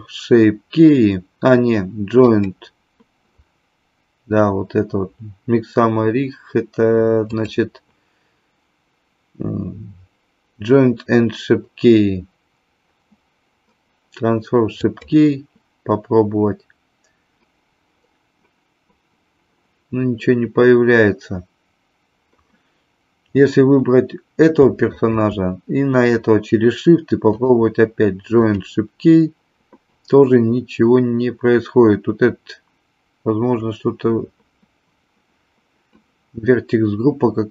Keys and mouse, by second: 7.3-16.3 drag, 24.8 shift+click, 27.4-28.6 drag.